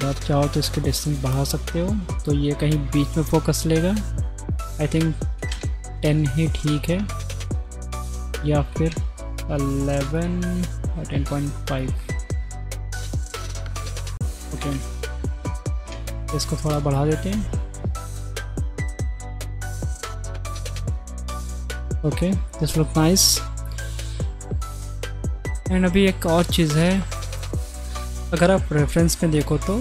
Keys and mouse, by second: 0.2-2.0 middle drag, 4.5-5.5 drag, 8.3 click, 8.8 KP_1, 10.2-13.0 drag, 15.6 click, 22.6 shift+click, 25.5 middle click, 29.0-29.4 middle drag, 29.5-29.8 middle drag.